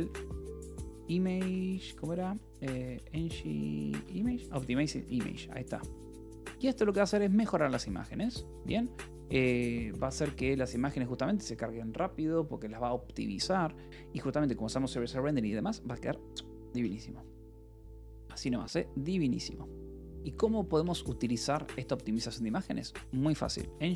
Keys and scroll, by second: 0.0-1.3 typing, 2.7-4.4 typing, 4.8 Escape, 5.5 j, 6.3 k, 6.6 shift+;, 7.7 k, 8.1 Return, 8.7 k, 9.5 j, 9.8 a, 10.2 Tab, 11.6 <, 15.2 Left, 18.1 g, 18.4 space, 20.7 BackSpace, 21.4 [, 23.2-23.9 typing.